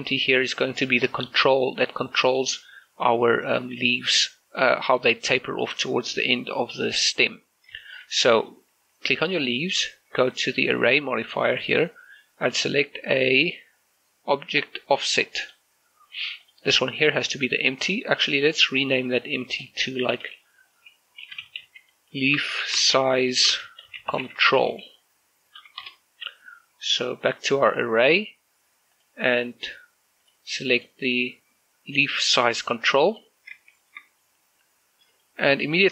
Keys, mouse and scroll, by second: 0.9 scroll down 1, 1.3 shift+middle click, 7.5 scroll up 2, 7.9 shift+middle click, 8.4 right click, 10.7 click, 15.5 click, 18.7 right click, 19.6 click, 21.3-25.7 typing, 25.9 Return, 27.1 right click, 29.0 click, 33.2 click, 33.8 shift+middle click, 34.3 middle click, 35.7-35.9 scroll up 4.